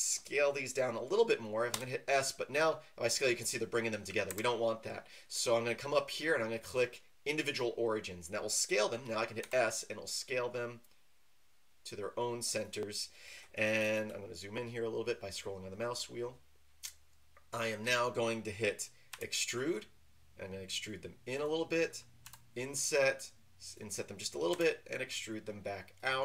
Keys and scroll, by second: 1.7 s, 4.3 Escape, 9.4 s, 19.1 e, 22.2 i, 24.5 e.